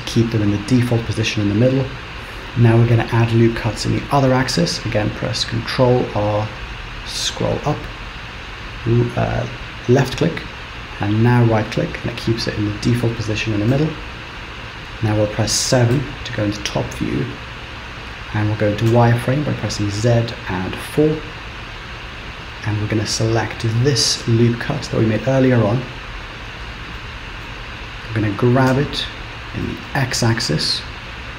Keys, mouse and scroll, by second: 5.9 ctrl+r, 16.0 KP_7, 16.7-18.9 scroll down 1, 18.9 z, 22.9 click, 25.2-25.8 scroll up 2, 27.0 shift+middle click, 28.8 g.